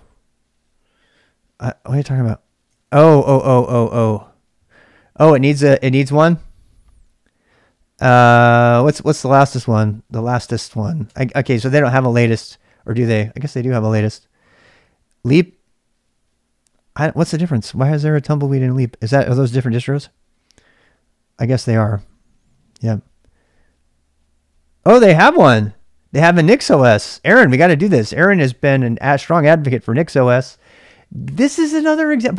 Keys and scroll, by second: 0.0-32.3 typing, 2.7 ctrl+[.